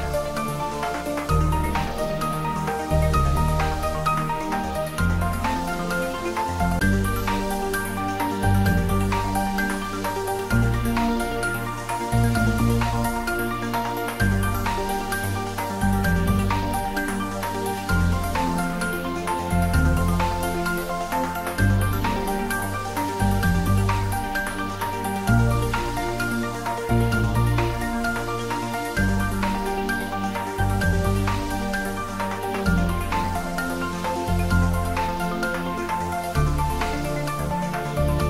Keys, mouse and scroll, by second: 0.1-0.7 middle drag, 1.4-1.8 scroll down 1, 2.7 click, 3.4-4.3 scroll up 1, 4.3 click, 5.5 scroll up 1, 7.2-8.4 drag, 10.2-11.7 typing, 12.3 scroll down 1, 13.2 click, 13.7-14.3 scroll down 1, 14.3-17.1 middle drag, 18.2 click, 24.0-24.7 scroll down 1, 24.7-28.1 middle drag, 28.4-29.9 scroll up 1, 29.9 click, 30.5-31.3 scroll up 1, 31.3 Tab, 32.6 click, 34.6 alt+shift+click.